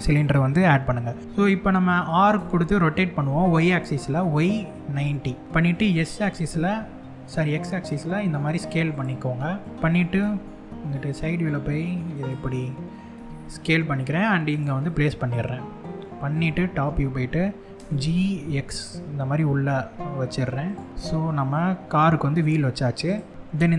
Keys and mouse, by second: 1.9 r, 3.4 y, 4.4 9, 4.6 0, 5.2 click, 6.0 x, 8.5 click, 9.5 x, 9.8 KP_3, 11.0 s, 11.8 click, 12.8 g, 14.1 click, 14.5-15.6 middle drag, 16.4 KP_7, 17.4 g, 18.1 x, 20.3 click, 20.5 middle click, 20.6-22.2 middle drag, 22.7 click, 23.5 middle click.